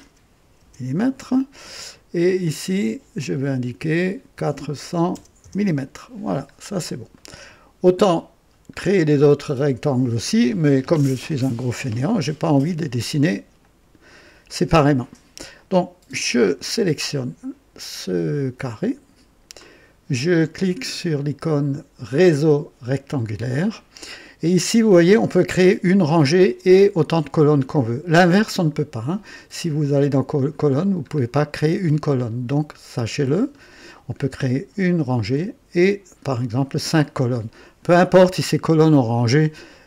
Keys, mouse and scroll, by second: 0.5 Return, 2.2 click, 4.4 KP_4, 4.7 KP_0, 5.4 Return, 6.4 typing, 6.5 scroll down 1, 7.1 right click, 8.7 scroll down 1, 9.2-10.8 right drag, 9.9 typing, 13.6 click, 15.5-16.7 drag, 18.7-19.6 right drag, 22.1 click, 29.8 click, 30.2-30.9 scroll down 3, 31.2 scroll down 2, 32.6-33.3 scroll up 2.